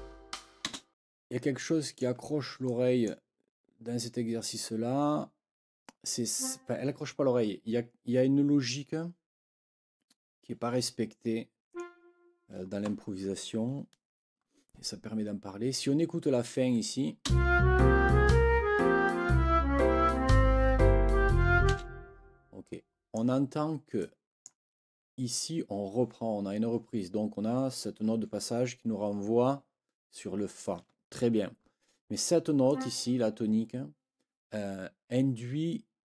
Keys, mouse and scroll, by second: 0.6 space, 1.1 ctrl+scroll up 2, 1.5 ctrl+click, 1.8-2.1 ctrl+scroll down 3, 2.7-3.2 scroll down 4, 2.7 click, 6.3 click, 11.7 click, 17.2 space, 22.3 space, 22.6 click, 24.0 click, 32.7 click.